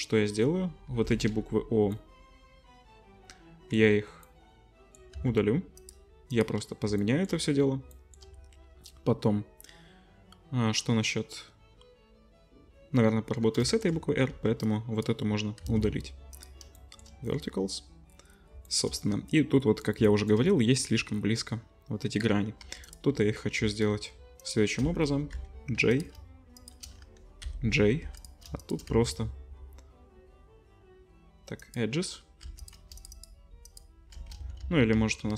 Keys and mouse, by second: 0.3 l, 0.9 l, 3.3-6.8 middle drag, 5.1 x, 6.8 shift+click, 7.2 middle click, 7.8 shift+click, 8.2-14.6 middle drag, 14.3 3, 14.6-16.4 drag, 15.6 x, 16.8-18.6 shift+drag, 18.7-22.9 shift+drag, 22.6 1, 22.9-24.4 middle drag, 24.4 shift+click, 24.5-25.9 shift+middle drag, 25.3 j, 25.9 click, 26.0 middle click, 26.6 shift+click, 27.4 j, 28.0 2, 28.9 x, 32.4 2, 32.6 click, 33.1 alt+shift+click, 33.6 alt+shift+click, 34.4 ctrl+z, 34.6 ctrl+z, 34.9 ctrl+z, 35.2 ctrl+z.